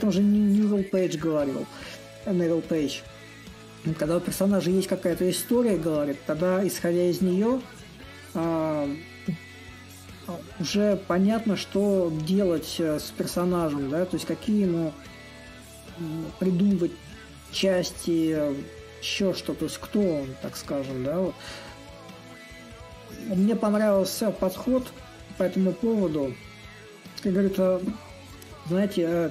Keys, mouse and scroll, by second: 2.5-7.5 drag, 7.7-12.7 drag, 13.2-18.2 drag, 19.2-24.2 drag, 24.3-29.3 drag.